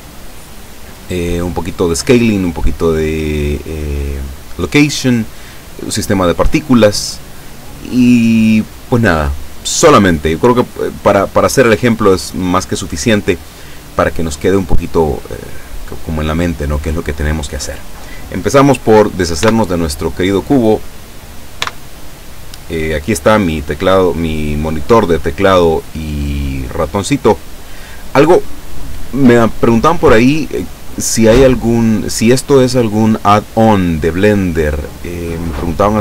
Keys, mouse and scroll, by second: 19.4 x, 20.6 right click, 21.6 x, 22.0 click, 23.3 click, 24.4-27.0 drag, 32.7 click.